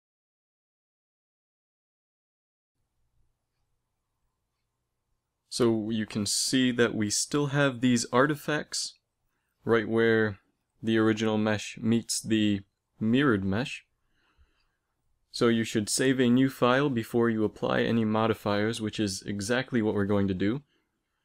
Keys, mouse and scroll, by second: 14.5 ctrl+s, 15.9-17.6 drag, 17.3 Tab, 19.2 Tab.